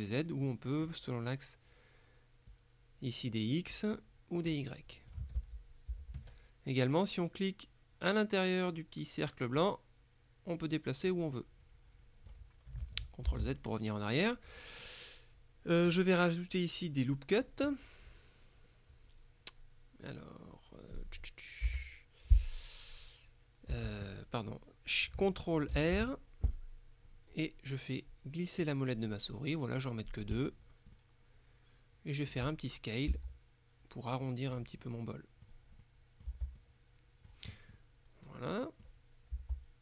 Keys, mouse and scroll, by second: 0.5 middle click, 2.6-4.3 drag, 4.5-5.7 drag, 5.5 ctrl+z, 9.6-12.9 drag, 13.4 ctrl+z, 14.9-16.4 middle drag, 21.8 Delete, 23.8 Escape, 25.8 ctrl+r, 30.4 click, 33.2 s, 34.6 click, 35.9 middle click, 36.4 Tab, 36.6 middle click, 39.4 Tab.